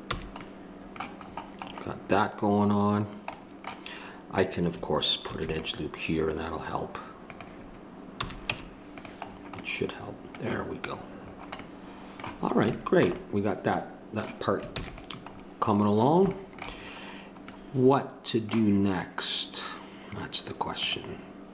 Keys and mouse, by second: 0.1 a, 3.3 middle click, 5.2 ctrl+r, 8.2 a, 9.3-11.7 middle drag, 14.7 ctrl+s.